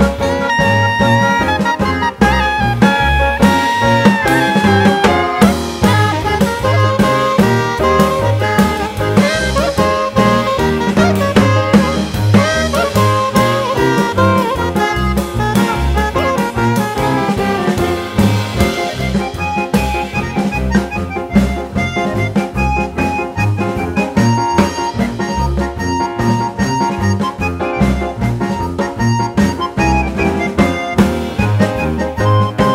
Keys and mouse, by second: 0.3 0, 1.7-2.7 drag, 3.6-4.9 drag, 5.6-6.8 drag, 7.6 click, 9.0 click, 10.8 click, 11.8-12.9 drag, 13.8 click, 14.8 click, 15.8-16.5 drag, 17.4 click, 18.3 click, 19.8-21.0 drag, 22.5 click, 24.5 click, 25.5-26.9 drag, 28.2 click, 32.2-32.7 drag.